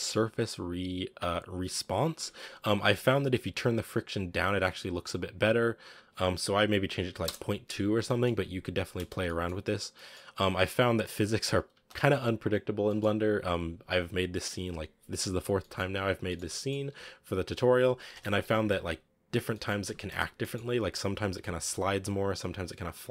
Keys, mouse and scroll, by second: 2.4-2.9 scroll up 3, 4.1 click, 5.2-7.9 drag, 7.9-9.0 middle drag, 9.0 space, 9.1-10.2 middle drag, 10.2-10.9 scroll down 2, 10.9-11.6 middle drag, 11.6 space, 12.0 click, 12.8 middle drag, 13.0-14.0 scroll down 4, 15.5-16.0 middle drag, 16.0 scroll up 3, 16.1-16.7 shift+middle drag, 16.7 scroll up 1, 16.8 a, 17.5 right click, 18.2 KP_Decimal, 18.3 a, 18.7 scroll down 3, 19.4-20.0 middle drag, 20.0 space, 20.2 scroll down 3, 20.3-23.1 middle drag.